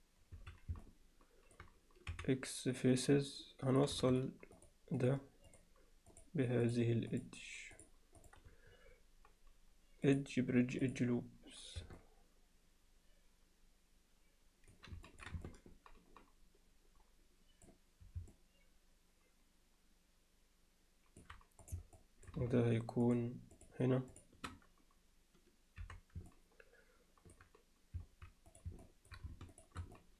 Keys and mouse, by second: 0.8-1.6 alt+middle drag, 2.1 x, 4.6 shift+drag, 5.0 shift+drag, 5.5 shift+click, 6.1 shift+click, 6.7 shift+click, 7.8 shift+click, 8.2 shift+click, 10.1-11.0 drag, 12.0-14.7 middle drag, 15.1 ctrl+alt+middle click, 15.5-17.7 alt+middle drag, 18.3-21.2 alt+middle drag, 21.7 click, 22.0 middle click, 23.1 shift+click, 26.3-27.4 middle drag, 28.8 alt+middle drag, 29.5 shift+click, 30.0-30.1 middle drag.